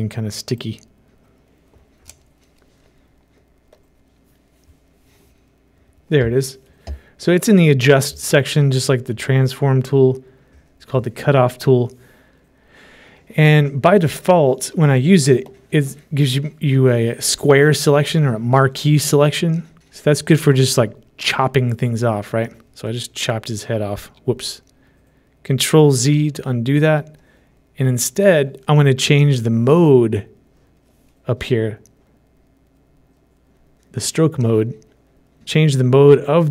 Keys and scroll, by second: 26.2 ctrl+z.